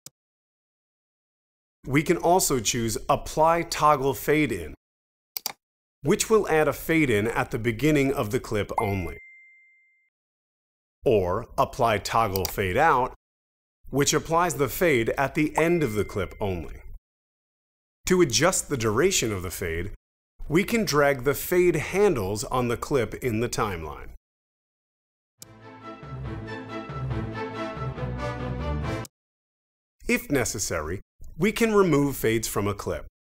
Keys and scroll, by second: 0.0 space, 25.3 space, 29.0 space.